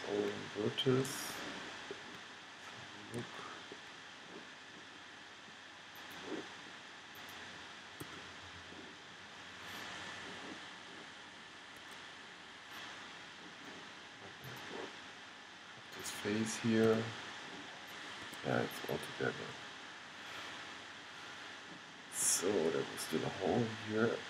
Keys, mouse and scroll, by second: 3.1 middle click, 4.2 middle click, 5.1 middle click, 8.2 g, 9.0 click, 14.6-17.8 middle drag, 17.1 g, 22.5-24.2 middle drag.